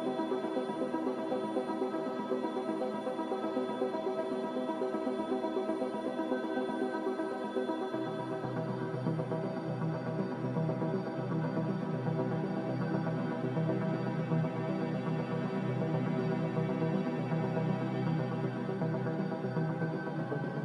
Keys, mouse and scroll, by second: 1.0 Escape, 1.1 Escape, 2.0 b, 3.0 Delete, 4.1 m.